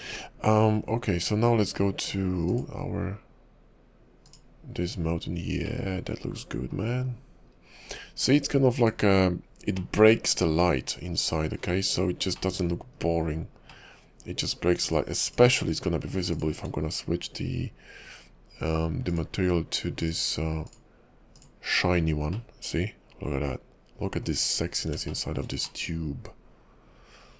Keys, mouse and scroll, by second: 0.1 shift+middle click, 0.1 scroll up 1, 0.2 KP_5, 0.8-3.5 scroll down 2, 3.7 click, 5.3 scroll up 1, 5.8 middle click, 7.0 KP_5, 8.9 click, 9.9 middle click, 10.7 KP_5, 11.7 scroll up 2, 12.5 middle click, 12.9 KP_5, 13.9 middle click, 14.9 click, 15.3 click, 16.0 scroll down 2, 16.4 shift+click, 16.7 shift+click, 19.1 click, 20.0 click, 21.4 click, 22.1-22.5 scroll down 2, 22.5 middle click, 24.5-24.9 scroll up 6, 25.3 shift+middle click, 25.8 middle click.